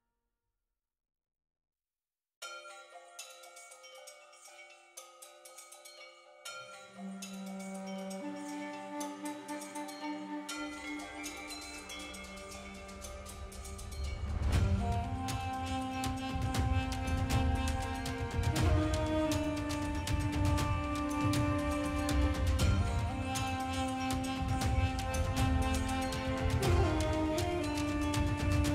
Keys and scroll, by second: 5.5 [, 9.8 ctrl+alt+z, 10.1 [, 15.4 ], 26.4 space, 27.2 space, 27.6 o, 27.9 ].